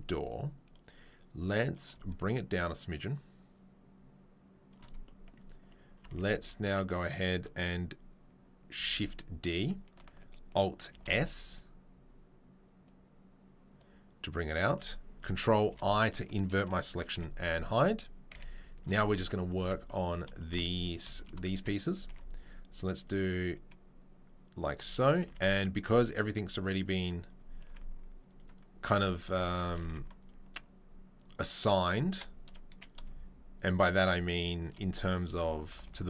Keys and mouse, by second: 2.1-8.7 shift+drag, 6.0 Tab, 8.7-14.5 shift+right drag, 8.7 shift+d, 10.9 alt+s, 14.5-33.9 shift+middle drag, 16.0 ctrl+i, 17.1 h, 18.3 z, 19.6 a, 22.0 ctrl+r, 25.3 ctrl+r, 27.6 ctrl+r, 29.2 3, 29.8 ctrl+r, 32.1 3, 33.9 shift+right click, 34.0 shift+middle click, 34.2 shift+right click, 34.3-36.0 shift+middle drag.